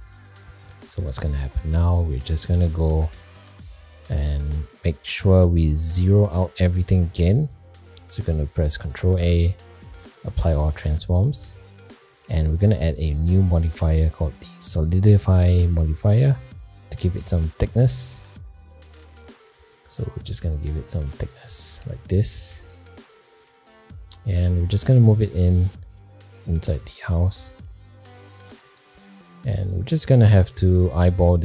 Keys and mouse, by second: 0.1 shift+middle click, 1.9 click, 3.4 click, 3.9 shift+middle drag, 5.2-5.5 middle drag, 6.1 middle click, 6.5 shift+middle click, 7.1 middle drag, 9.0 ctrl+a, 11.4 middle click, 13.6-15.9 drag, 16.6 middle click, 17.3 shift+middle click, 18.0-18.5 middle drag, 18.8 middle click, 19.5 middle click, 20.5-23.5 drag, 24.1 middle click, 24.6 g, 27.1-27.6 middle drag, 28.4 shift+middle click, 29.0 middle click, 30.1-31.4 shift+drag.